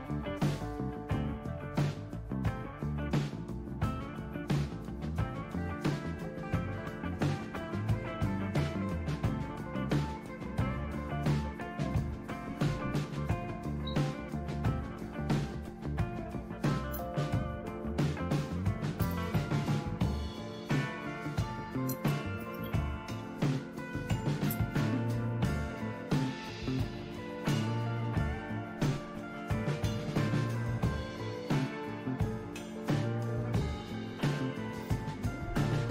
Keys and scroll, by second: 3.4 End, 4.9-5.2 Left, 10.1 ctrl+k, 12.1 ctrl+u, 12.3 ctrl+u, 13.0 Up, 13.2 Up, 16.4 #, 16.9 space, 17.6 Down, 17.9 Left, 18.1 Left, 18.9 Return, 19.2 Return, 19.6 Up, 19.6 typing, 21.4-26.2 typing, 26.9 Down, 27.4 Right, 27.6-28.6 typing, 29.1 Right, 29.4 Right, 29.6 Right, 29.6-30.3 typing, 30.5 Right, 30.5 Right, 30.6 Right, 33.4 Right.